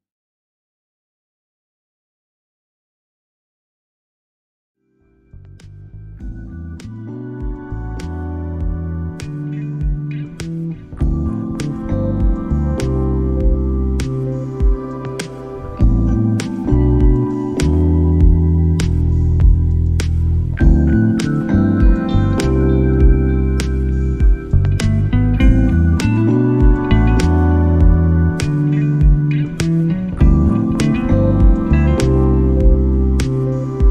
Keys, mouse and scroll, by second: 10.9 click, 14.9 middle click, 18.4 right click, 18.5 middle click, 19.5 middle click, 19.9 middle click, 20.5 middle click, 23.0-24.0 alt+right drag, 24.1 middle click, 25.9 click, 26.7 click, 27.3 drag, 27.8 click, 28.9 click, 30.8-33.5 drag, 33.5 middle click.